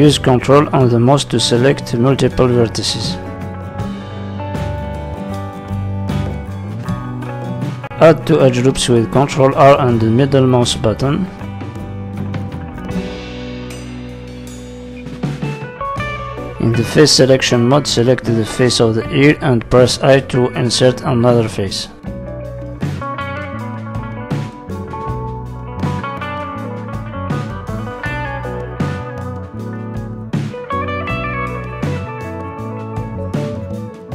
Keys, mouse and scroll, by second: 0.0 middle click, 1.2 click, 1.5-2.6 scroll down 3, 1.7 middle click, 2.6 ctrl+click, 3.5 g, 5.5 middle click, 6.6 middle click, 7.8 ctrl+r, 10.9 click, 11.3 middle click, 12.9 scroll up 2, 13.1 middle click, 14.0 shift+middle click, 14.4-15.4 scroll up 2, 16.1 click, 16.7 click, 17.7 i, 19.6 middle click, 20.3 e, 20.7 middle click, 21.4 click, 22.3 middle click, 22.9 s, 24.1 middle click, 24.8 click, 25.5 middle click, 26.1 s, 27.4 middle click, 28.4 click, 29.4 middle click, 32.1 click.